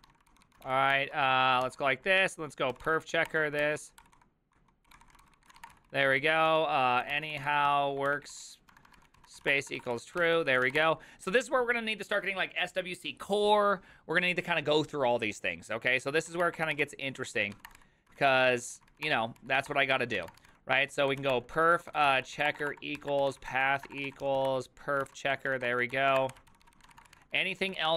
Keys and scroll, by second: 0.0-0.7 typing, 0.0 ctrl+c, 0.9 ctrl+t, 1.7 ctrl+p, 2.5-11.2 typing, 16.1-27.9 typing, 19.7 Return, 26.6 ctrl+c.